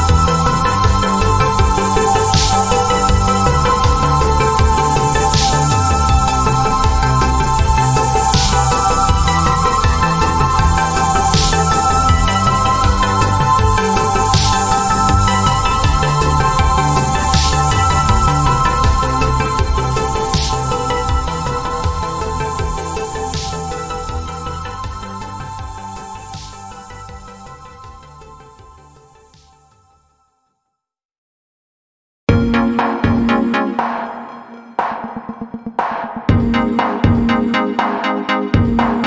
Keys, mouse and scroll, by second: 2.0 z, 3.0 click, 4.6 z, 6.1 click, 17.2 click, 20.6 click, 36.0 ctrl+click.